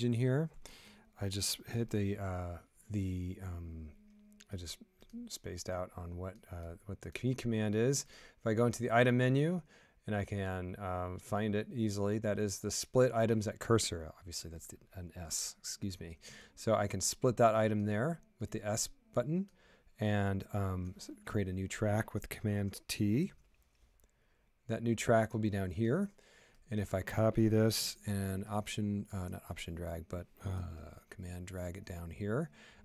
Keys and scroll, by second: 2.1 typing, 16.2 typing, 23.2 super+t.